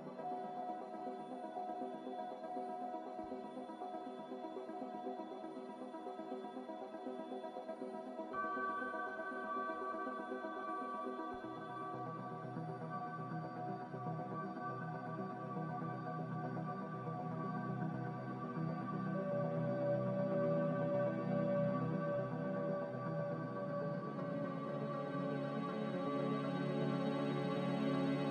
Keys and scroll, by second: 25.6 a.